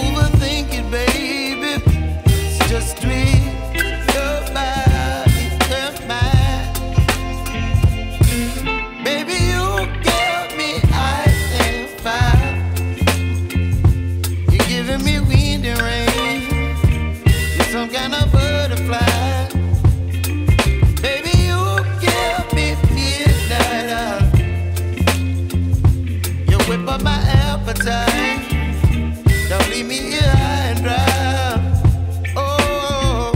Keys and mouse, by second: 4.9 click, 5.2 space, 5.3 click, 5.7 space, 6.5 j, 10.1 click, 13.9 click, 15.3 ctrl+z, 16.4 alt+click, 18.5 click, 26.6 click, 27.5 x, 29.4 click.